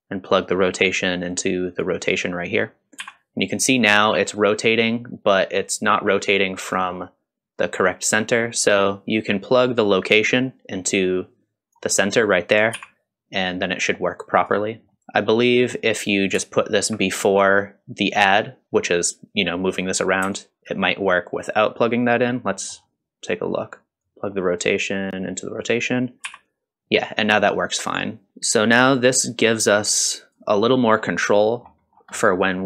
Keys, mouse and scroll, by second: 0.3-1.9 drag, 3.0 r, 6.7 middle click, 8.3 middle click, 9.6-11.8 drag, 12.7 r, 14.9 middle click, 15.0 drag, 15.9 click, 20.3 alt+click, 21.0-22.4 drag, 22.6 middle click, 24.0-25.4 drag, 26.2 r, 28.3 s, 28.3 r, 28.7 click, 29.9-30.9 drag, 30.9 scroll down 1, 31.4 middle click, 31.8-32.1 scroll down 2, 32.1 middle click, 32.5 scroll down 2.